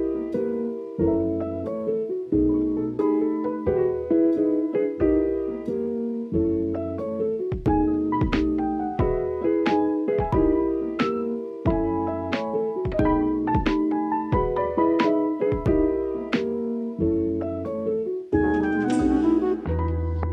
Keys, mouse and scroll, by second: 1.0 r, 17.7 KP_7.